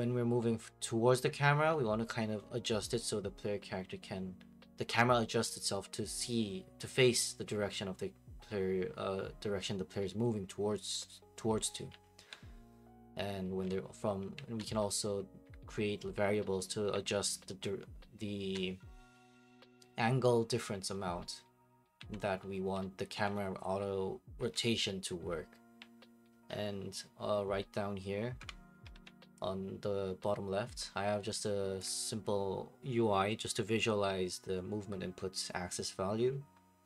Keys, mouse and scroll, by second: 11.6-14.8 typing, 16.7-18.5 typing, 21.7-25.5 typing, 28.4 F8, 31.8-32.9 ctrl+drag, 33.7 click.